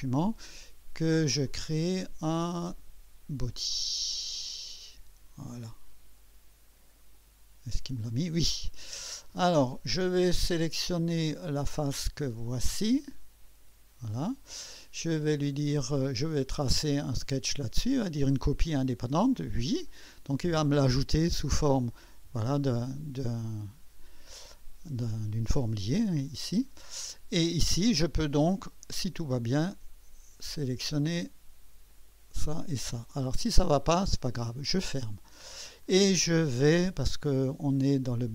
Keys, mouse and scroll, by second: 0.0 click, 1.4 click, 2.3 click, 3.7 click, 7.1 click, 9.2-10.1 drag, 13.4 click, 17.3 click, 19.9 click, 21.6 click, 26.0 click, 28.7 click, 30.9 click, 31.9 click, 33.0 click, 34.3 click.